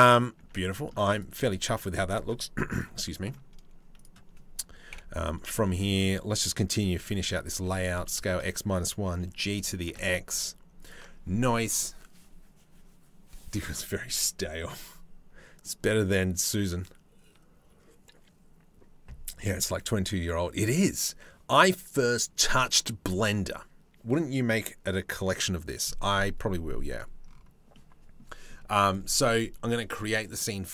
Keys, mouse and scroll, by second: 0.0 Tab, 0.4 middle click, 0.8 click, 1.0 middle click, 2.4 click, 2.7 middle click, 4.5 KP_8, 4.5 KP_7, 5.2 shift+middle click, 6.5 shift+d, 7.3 s, 8.7 g, 27.4 middle click.